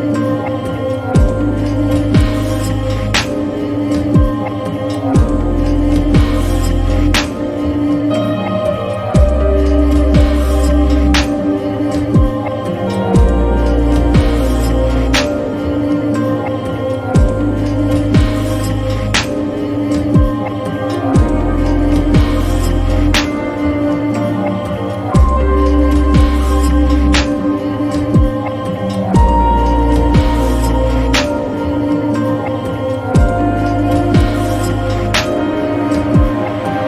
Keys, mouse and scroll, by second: 12.5 click, 16.6 click, 20.7 click, 23.5 click, 23.5-31.0 drag, 36.6-36.8 drag.